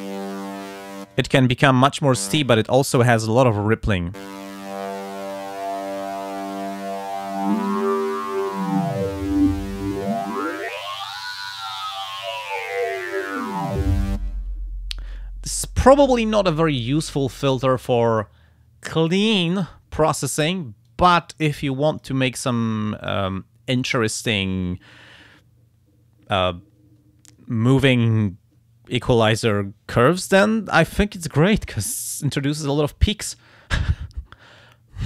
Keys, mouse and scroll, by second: 4.6-6.0 drag, 7.0-14.3 drag, 17.7 click, 20.9-22.2 drag, 22.5 click, 23.7 click.